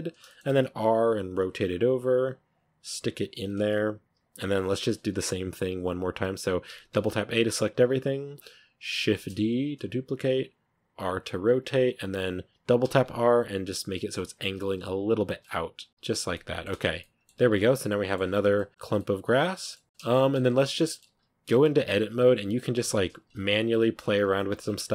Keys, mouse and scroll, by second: 0.1 shift+middle click, 0.4 r, 2.8 g, 4.3 r, 4.6 g, 6.5 a, 6.8 a, 7.7 scroll down 3, 8.2-9.0 scroll up 4, 9.0 shift+d, 10.7 r, 12.7 r, 14.7 g, 15.3-15.9 middle drag, 15.9 r, 16.2-16.7 middle drag, 16.7 Tab, 16.8-17.6 scroll down 6, 16.9-17.2 middle drag, 17.6-18.0 middle drag, 18.0-18.4 scroll up 5, 18.4 middle drag, 18.7 scroll down 2, 18.8-20.0 middle drag, 20.0 scroll up 4, 20.2 Tab, 20.6 z, 20.7 middle drag, 20.9 a, 21.0 scroll up 2, 22.3-24.9 typing, 24.4 Tab, 24.5 scroll down 2, 24.6 middle click.